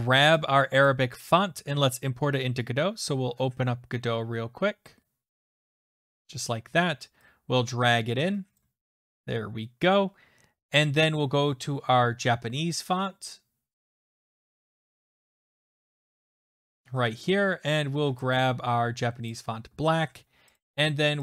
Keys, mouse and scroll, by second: 0.9 click, 5.4 click, 6.2 alt+Tab, 8.6 click, 10.8 click, 14.0 click, 15.2 click, 19.3 click, 20.6 click.